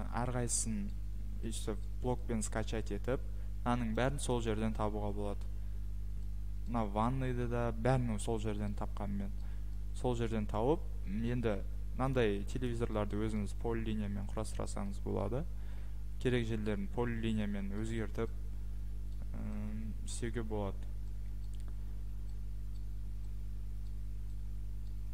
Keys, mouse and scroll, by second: 0.2 scroll, 0.9 scroll, 1.8-2.2 scroll, 2.5 scroll, 3.1-4.1 scroll, 4.1 click, 4.1 scroll, 4.3 click, 4.6 Escape, 5.0-5.6 scroll, 6.2-7.1 scroll, 8.6-9.5 scroll, 10.2-11.3 scroll, 11.3 Escape, 11.7-12.7 scroll, 12.1 click, 12.7 click, 12.9-13.4 scroll, 13.4 Escape, 13.9 middle click, 14.0 middle click, 14.2 middle click, 14.8 middle click, 15.2 middle click, 16.2 middle click, 16.7 middle click, 20.1 middle click, 20.6 middle click, 20.7 middle click, 21.1 middle click, 21.5 middle click, 22.8 middle click, 23.5 middle click, 23.9 middle click, 24.9 middle click.